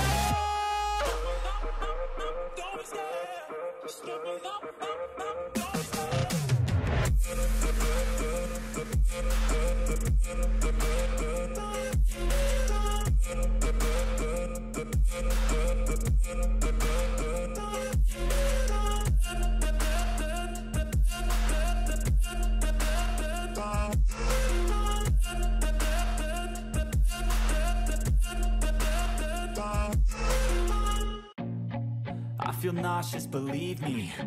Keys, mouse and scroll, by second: 9.3 ctrl+=, 12.3 shift+click, 18.0 shift+click, 22.4 shift+click, 27.5 shift+click, 30.9 shift+click.